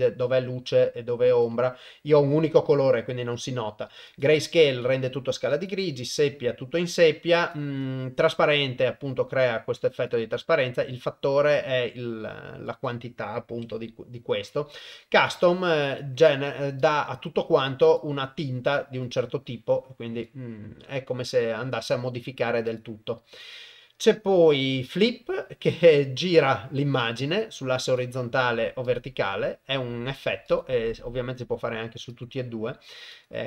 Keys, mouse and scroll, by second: 3.4-4.2 drag, 4.7-5.7 drag, 6.1-7.5 drag, 10.1-11.6 drag, 12.7-14.9 drag, 15.8 click, 19.0-20.3 drag, 22.6 click, 23.4-25.0 drag, 27.9 click, 28.9 click, 30.5 click, 32.1 click, 33.1 click.